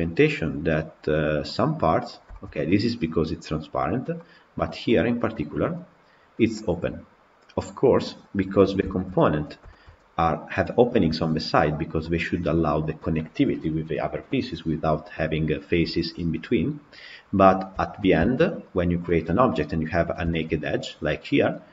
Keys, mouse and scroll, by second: 2.2-8.1 shift+middle drag, 8.1 scroll down 5, 8.4-9.2 middle drag, 9.5-10.2 shift+middle drag, 10.2 click, 10.9 KP_Decimal, 11.5 scroll down 3, 11.8-16.8 middle drag, 16.8-17.6 scroll down 5, 17.6-18.6 shift+middle drag, 18.6 click, 18.9-19.4 middle drag, 19.4 scroll up 3, 20.1-21.7 shift+middle drag.